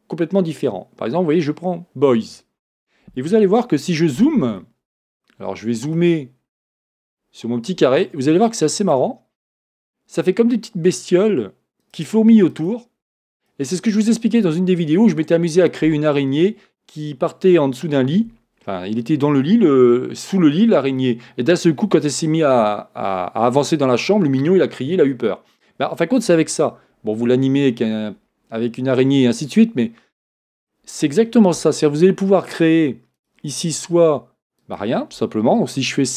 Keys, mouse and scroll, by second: 5.3-8.8 shift+middle drag, 6.3 scroll down 1, 6.4 scroll up 1, 8.8-26.3 drag, 8.8 scroll up 1, 30.1-32.5 scroll up 2, 33.2 scroll down 1, 33.2-36.1 drag.